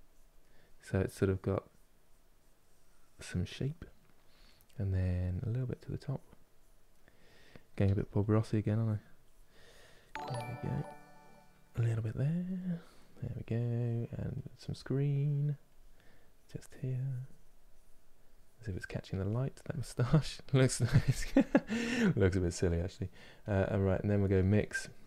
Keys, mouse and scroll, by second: 0.1 middle click, 0.9-3.7 drag, 3.7-5.3 middle drag, 5.3-6.6 drag, 6.6-15.4 middle drag, 15.4-19.5 drag, 19.5-23.9 ctrl+middle drag, 23.9-25.0 drag.